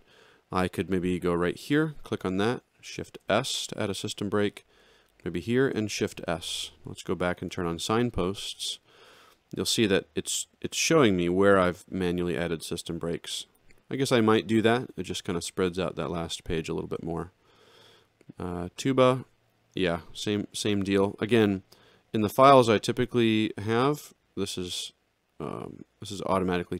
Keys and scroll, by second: 3.1 shift+s, 5.6 shift+s, 7.5 F10, 16.8 alt+shift+], 20.4 ctrl+shift+l.